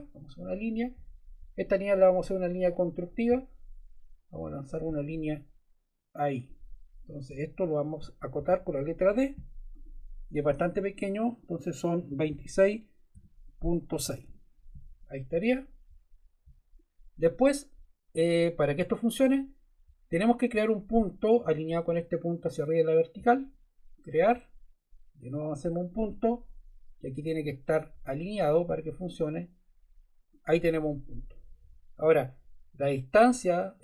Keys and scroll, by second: 7.3 Escape, 8.3 d, 11.8-13.9 typing, 14.2 Return, 31.6 Escape.